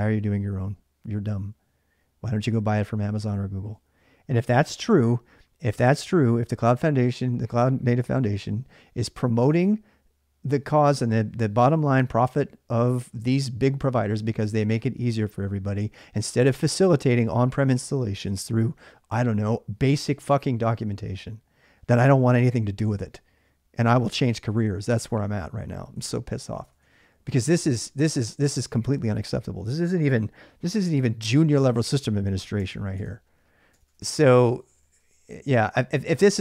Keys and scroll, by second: 26.3-27.1 typing, 32.4 Tab, 32.8 Tab, 33.5 Tab, 33.8-35.3 typing.